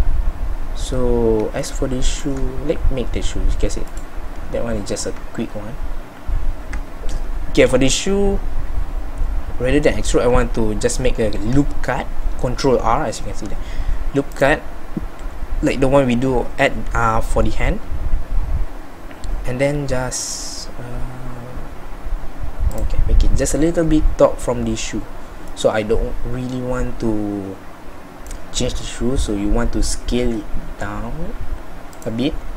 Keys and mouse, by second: 1.8-32.5 middle drag.